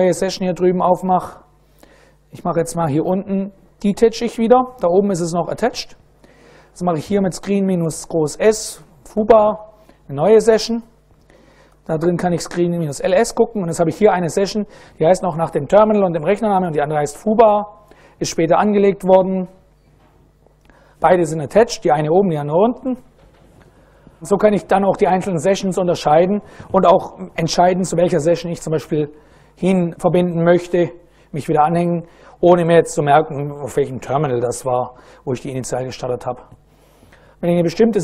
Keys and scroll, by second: 3.4 ctrl+a, 3.9 ctrl+d, 5.9-9.5 typing, 10.0 Return, 10.7-13.0 typing.